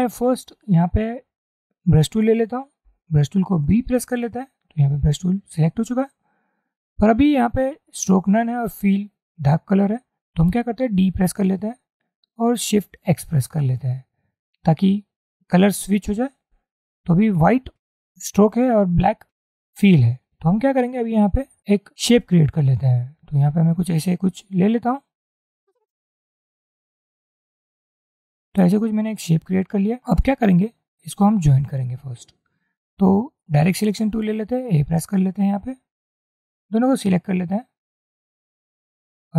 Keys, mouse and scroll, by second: 2.9 b, 11.1 d, 13.2 shift+x, 25.0-28.3 drag, 35.0 a, 36.2 click, 37.6 click, 38.0 double click.